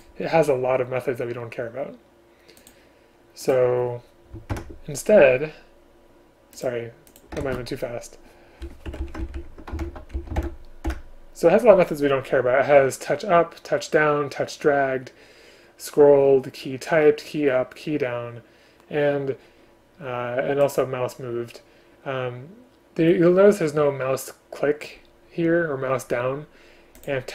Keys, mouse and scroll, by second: 0.0 shift+click, 4.6 ctrl+h, 7.5 ctrl+space, 9.0 Escape, 9.1 Left, 9.9 alt+Return, 10.3 Left, 10.5 alt+Return.